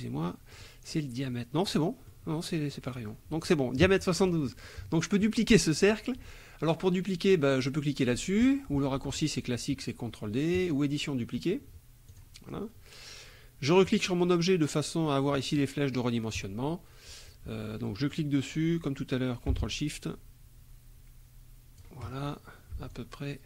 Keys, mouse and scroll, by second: 0.5 click, 1.7 middle click, 2.7 click, 4.5 click, 10.6 click, 12.1 click, 13.9 click, 18.1-22.0 drag, 22.9 ctrl+shift+click.